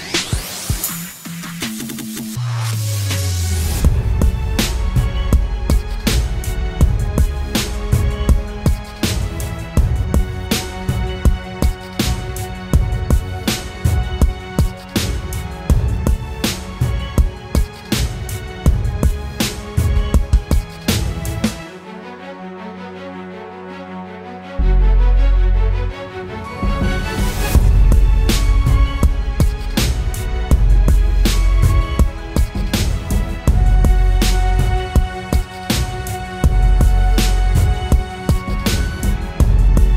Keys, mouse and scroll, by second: 8.4 right click, 10.1 typing, 10.9 double click, 19.0 typing, 19.6 double click, 21.8 right click, 23.2-23.7 typing, 24.5 double click, 33.8 right click, 35.0 double click.